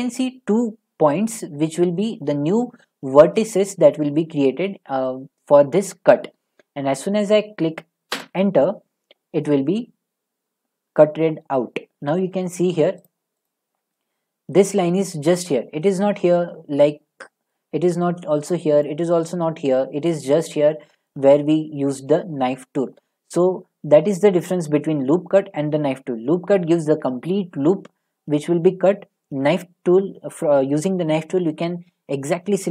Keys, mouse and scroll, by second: 8.1 Return, 11.1 Return, 12.2 middle click, 13.1 click, 13.5 click, 14.6 middle click, 15.9 middle click, 17.5 middle click, 18.9 middle click, 20.1 middle click, 21.1 middle click, 23.2 middle click.